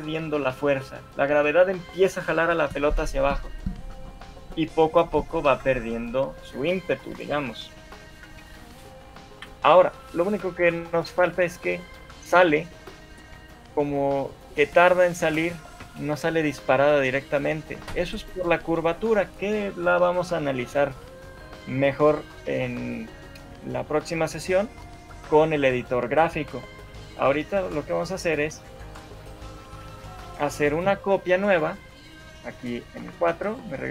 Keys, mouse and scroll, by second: 9.5 Escape, 10.1 shift+middle click, 10.9 right click, 20.7-21.2 scroll up 3, 21.3 shift+middle click, 21.9 scroll up 1, 22.3 shift+middle click, 26.8 shift+middle click, 28.4 right click, 30.6 shift+middle click, 33.2 ctrl+c, 33.2 Left, 33.4 Left.